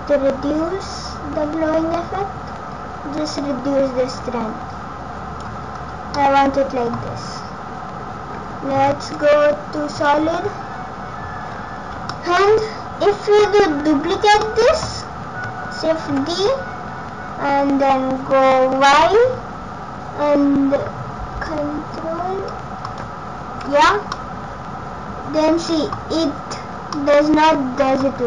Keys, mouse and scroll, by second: 5.8 scroll up 3, 6.1 middle click, 7.0 scroll down 4, 8.8 z, 10.5 scroll up 3, 12.0 middle click, 13.1-13.6 scroll down 4, 13.4 middle click, 14.4 middle click, 16.2 shift+d, 23.3 scroll up 1, 24.2 middle click, 24.2 scroll up 3, 26.5 scroll up 2, 27.0 middle click.